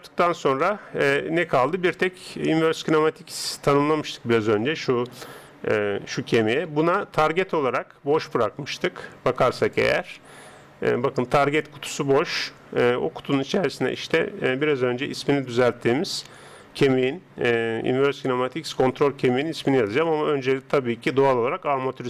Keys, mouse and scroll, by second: 0.3 n, 2.7 right click, 6.1 g, 9.6 click.